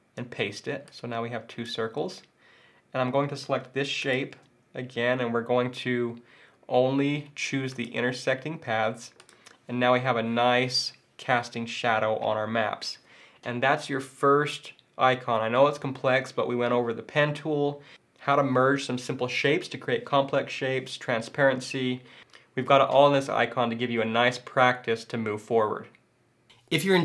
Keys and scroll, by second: 0.2 super+v, 1.8 super+z.